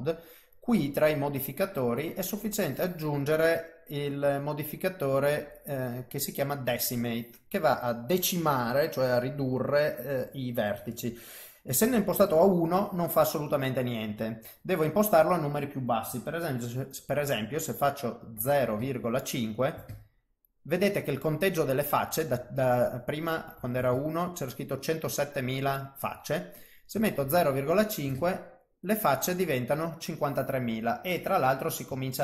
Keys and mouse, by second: 0.8 click, 2.0 click, 15.0 click, 23.2 click, 26.6 click, 30.7 middle click, 32.0 ctrl+middle click.